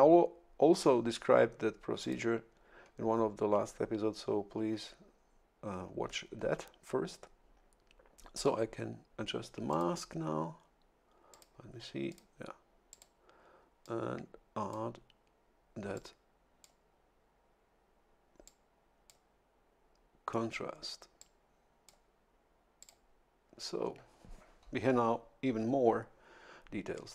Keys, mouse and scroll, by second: 2.0 click, 9.7 click, 11.3 click, 12.1 click, 12.9 click, 13.8-15.0 drag, 15.9 click, 18.4 click, 21.2 click, 22.8 click.